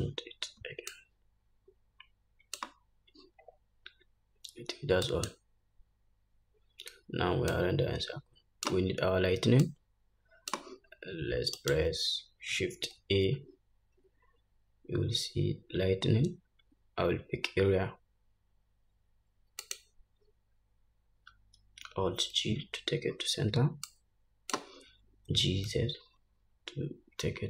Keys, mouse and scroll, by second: 8.0-11.8 drag, 13.4 shift+a, 22.9 alt+g, 24.4 click, 25.8 g, 26.7-27.4 drag.